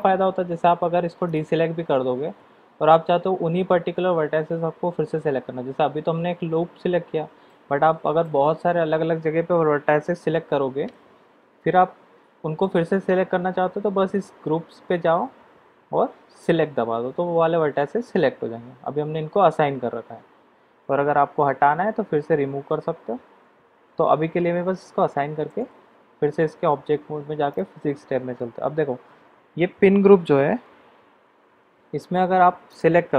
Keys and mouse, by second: 1.2 click, 16.4 click, 25.5 Tab, 27.5 click, 32.7-33.1 drag.